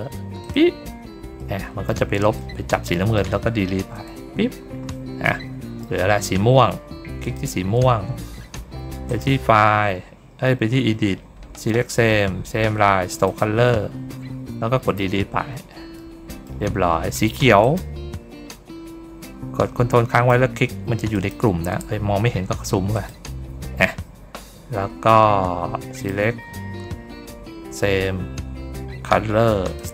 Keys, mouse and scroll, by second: 0.3 click, 1.3 middle click, 2.2 middle click, 5.1 middle click, 7.1 ctrl+click, 9.0 click, 13.1 click, 15.8 middle click, 17.5 ctrl+click, 20.0 ctrl+click, 21.0 ctrl+click, 21.8 ctrl+middle click, 22.8 ctrl+click, 23.7 ctrl+middle click, 25.9 click, 29.5 click.